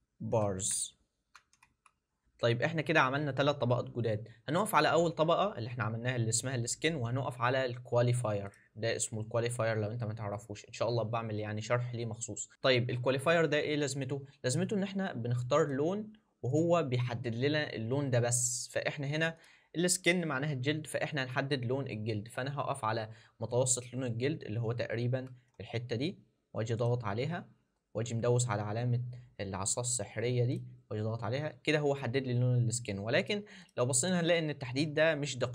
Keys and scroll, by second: 0.3 shift+b.